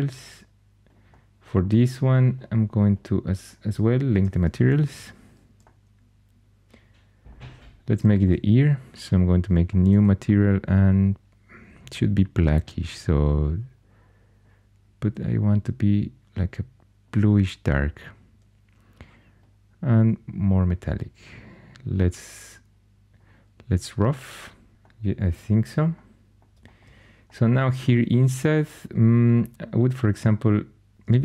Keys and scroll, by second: 4.7 super+l, 30.9 Tab.